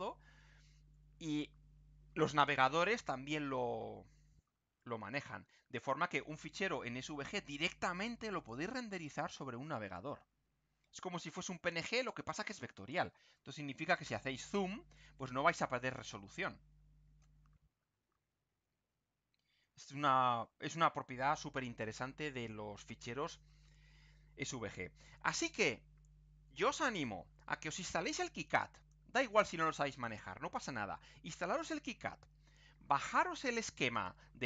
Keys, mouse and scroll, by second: 4.7-5.4 ctrl+scroll down 6, 7.3 click, 8.4 click, 11.8-13.4 ctrl+scroll up 4, 17.8-19.6 ctrl+scroll down 4, 20.3 ctrl+scroll up 2, 28.7 click, 33.9 click.